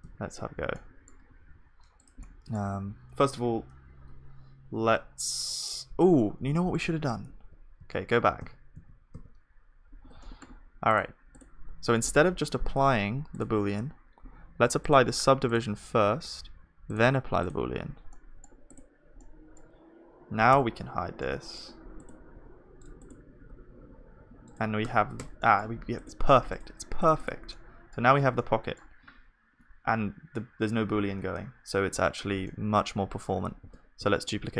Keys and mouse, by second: 0.1 ctrl+z, 0.8-6.7 middle drag, 1.4 s, 4.0 F3, 7.4 ctrl+z, 10.2 ctrl+z, 10.2-23.4 middle drag, 18.1-25.4 drag, 18.1-23.4 right drag, 20.6 h, 22.4 g, 23.4 g, 24.8 Tab, 25.4-32.5 middle drag, 27.0-33.6 drag, 27.0-32.5 right drag, 33.6 shift+d.